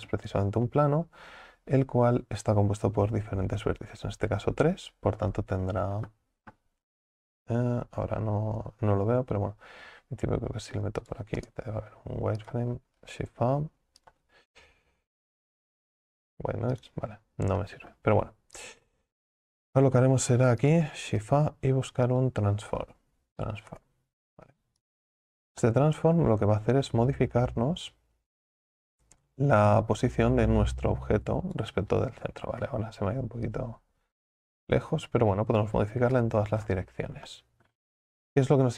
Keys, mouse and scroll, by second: 1.3-2.3 scroll down 2, 2.3-3.6 scroll down 1, 3.6-4.8 scroll down 1, 4.8-5.5 scroll down 1, 5.5 scroll down 1, 11.6 space, 23.8 shift+a, 29.8-32.6 drag, 32.6 ctrl+z, 33.6-36.1 drag, 36.1 ctrl+z.